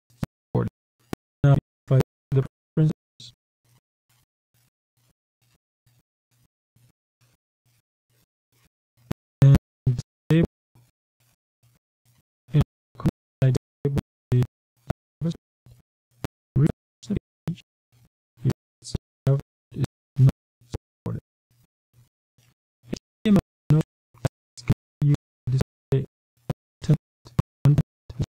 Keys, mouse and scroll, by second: 0.2-1.8 drag, 4.5 click, 5.8 click, 9.0-10.7 drag, 11.7 click, 13.7 click, 15.8 click, 19.7 click, 20.7 click, 21.7 q, 23.0 click, 24.5 click, 27.7-28.3 scroll down 3.